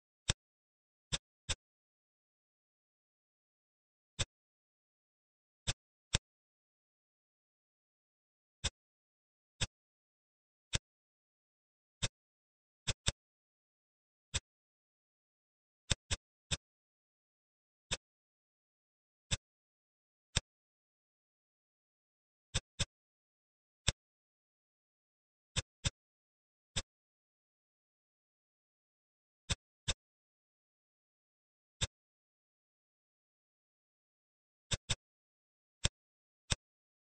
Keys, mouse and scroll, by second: 0.2 click, 0.9 Tab, 1.4-2.9 middle drag, 3.9 ctrl+s, 4.1-5.6 middle drag, 5.6-6.0 drag, 6.0-7.6 middle drag, 8.2-8.6 scroll down 1, 8.6-9.5 middle drag, 9.5 click, 9.9 Tab, 10.6 click, 11.3 ctrl+r, 12.9 click, 13.7 ctrl+r, 16.0 click, 16.4-17.5 middle drag, 17.5 ctrl+r, 19.2 click, 19.9 ctrl+r, 22.7 click, 23.5 ctrl+r, 25.8 click, 26.3 ctrl+r, 29.8 click, 31.4 ctrl+r, 34.8 click, 35.5 ctrl+r, 36.3 click.